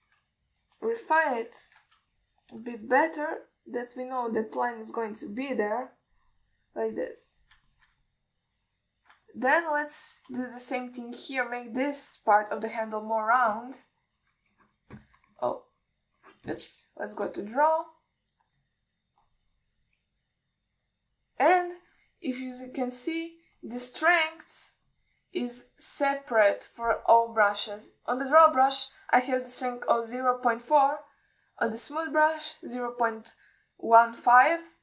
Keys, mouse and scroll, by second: 0.3 ctrl+alt+middle click, 1.0 ctrl+y, 2.9 ctrl+alt+middle click, 3.4 alt+shift+middle click, 4.2-7.4 drag, 8.0 click, 8.9 ctrl+middle click, 9.3 alt+middle click, 10.5 ctrl+middle click, 11.7 shift+middle click, 13.1 alt+shift+middle click, 15.5 scroll up 2, 18.4 click, 19.8 click, 20.5 click, 22.5 click, 23.8 click, 24.3 click, 24.8 drag, 26.1 click, 26.8 click, 27.2 click, 29.4 click, 32.9 click.